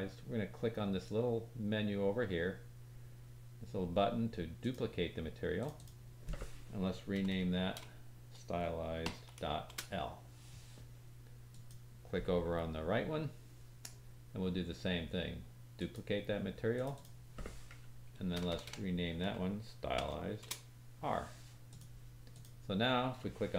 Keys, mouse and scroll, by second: 4.6-8.7 drag, 7.3 BackSpace, 9.3-11.6 drag, 15.7-19.5 drag, 18.4 BackSpace, 18.6 BackSpace, 20.2-21.7 drag, 22.3 click.